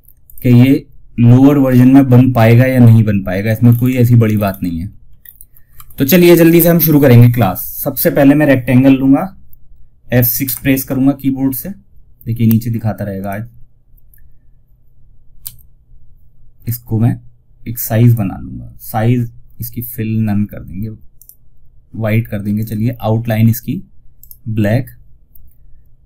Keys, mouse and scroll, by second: 1.7-2.7 scroll down 1, 7.5-8.3 alt+scroll up 1, 9.7 F6, 12.5 click, 14.7 F6, 15.9 click, 20.5 click, 23.5 right click.